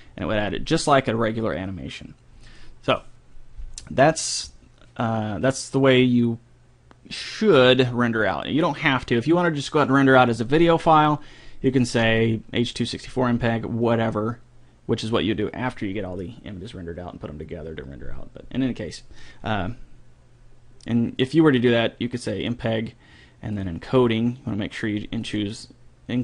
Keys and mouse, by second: 10.9-12.7 drag, 21.6-23.3 drag, 23.5-26.2 drag, 25.1-26.2 middle drag.